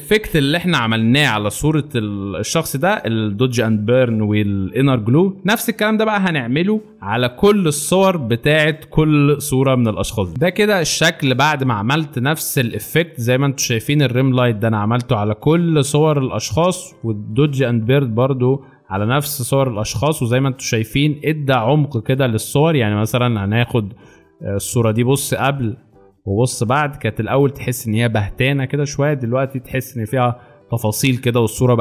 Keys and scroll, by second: 12.7 alt+space, 15.2 space, 18.5 alt+space, 23.3 alt+space.